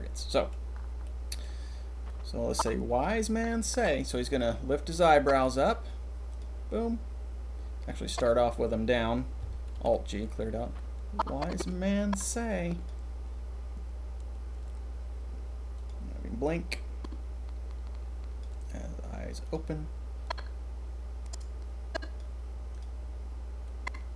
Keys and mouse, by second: 0.2 click, 1.0 click, 2.0-5.4 drag, 8.0 click, 9.7 alt+g, 10.7-11.7 drag, 12.8-17.0 middle drag, 18.4-19.4 middle drag, 20.2-22.1 drag, 23.6-24.1 drag.